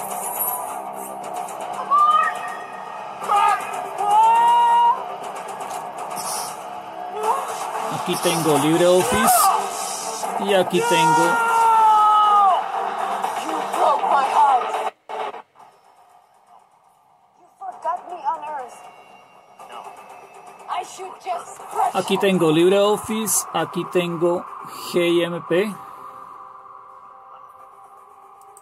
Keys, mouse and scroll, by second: 0.0 super+w, 4.8 super+Left, 7.0 super+Left, 9.7 super+Right, 21.4 super+Left, 23.1 super+Right, 28.5 click.